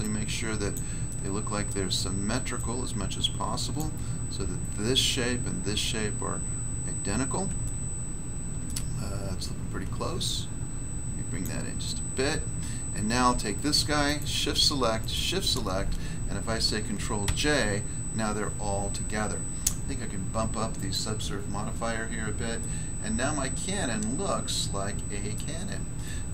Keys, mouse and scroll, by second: 0.7 click, 1.0 middle click, 1.6 middle click, 2.5 click, 3.7 click, 6.4-7.4 scroll up 1, 7.4 scroll up 1, 7.6 shift+middle click, 10.2 click, 11.3 click, 14.0 shift+right click, 14.1 shift+right click, 14.9 shift+right click, 15.0 shift+right click, 17.2 ctrl+j, 20.7 click, 20.8 click, 21.7 scroll down 1, 22.5 middle click, 25.3 middle click, 25.5 scroll down 1, 26.0 middle click.